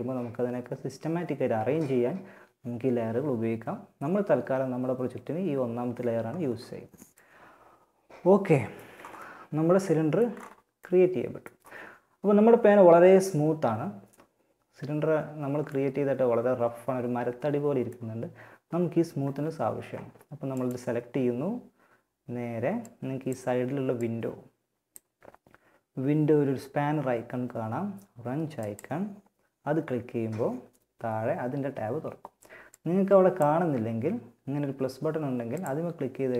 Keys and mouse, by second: 1.1-5.7 middle drag, 9.5-12.9 middle drag, 14.9-16.7 middle drag, 19.7-21.6 drag, 21.6 middle click, 22.1-25.0 drag, 27.8-29.8 drag, 31.9-33.7 drag, 34.7-36.3 drag.